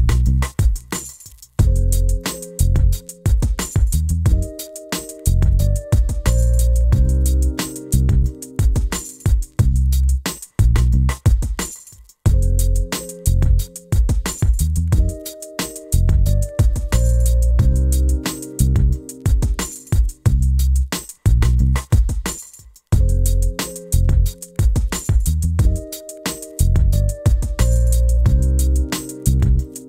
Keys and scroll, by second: 5.9 2, 6.0 0, 28.5 typing.